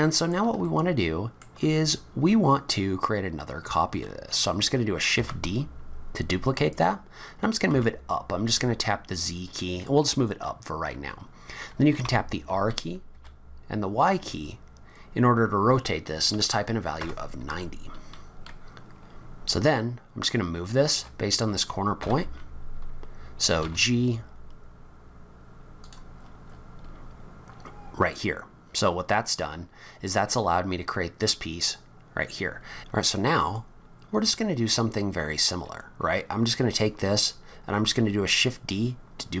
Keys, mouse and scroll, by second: 0.0 middle click, 0.6 shift+middle click, 5.1 shift+d, 10.5 scroll up 2, 12.0 r, 19.2 scroll up 2, 20.9 m, 23.6 g, 26.2-26.7 scroll up 10, 28.2-29.6 scroll down 11, 33.4 click, 34.5-35.4 scroll up 1.